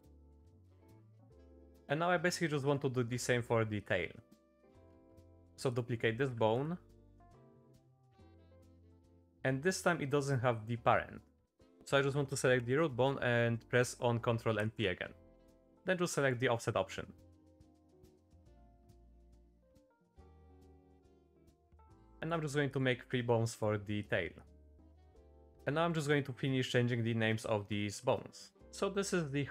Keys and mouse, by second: 0.6 middle click, 0.9 click, 1.5 click, 1.8 Tab, 1.8 middle click, 2.5 shift+middle click, 3.1 Tab, 3.7 click, 4.2 middle click, 4.5 shift+middle click, 4.6 click, 4.9 shift+d, 6.2 r, 7.3 r, 9.1 shift+middle click, 14.6 ctrl+p, 17.5 click, 17.8 click, 18.1 click, 18.5 click, 18.9 click, 19.2 click, 19.4 shift+middle click, 19.5 e, 19.9 click, 20.2 shift+middle click, 20.4 e, 20.8 click, 21.3 click, 21.4 click, 21.8 click, 22.1 click, 22.1 e, 22.7 click, 23.1 click, 24.4 click, 25.2 middle click, 27.9 shift+middle click, 28.6 Tab.